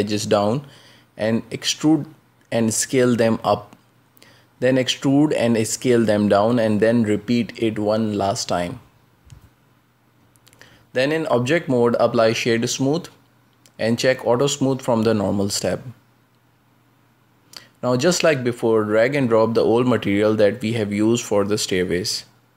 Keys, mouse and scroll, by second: 0.4 s, 1.3 e, 2.2 s, 3.4 e, 4.7 s, 6.3 e, 7.6 s, 9.8-10.6 scroll down 11, 10.7-11.7 shift+middle drag, 11.7 Tab, 12.9 w, 14.4 ctrl+space, 15.6-18.0 drag, 18.6 ctrl+space, 19.3-21.2 middle drag, 21.2 right click, 22.3 ctrl+space.